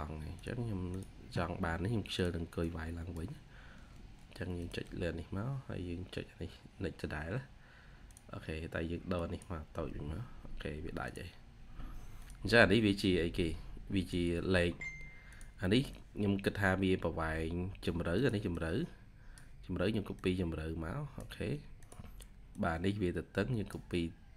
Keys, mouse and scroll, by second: 2.5 double click, 9.8 x, 18.4 double click.